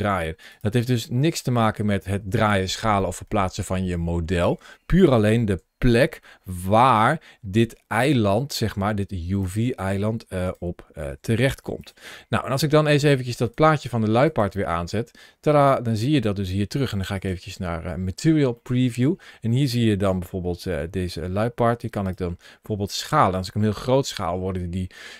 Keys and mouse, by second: 0.3 right click, 1.3 middle click, 2.8-4.3 middle drag, 5.4 g, 7.8 click, 8.7 g, 9.2 click, 9.9 s, 10.3 click, 10.9 g, 13.3 click, 17.0 click, 18.5 middle click, 20.6 s, 22.3 s.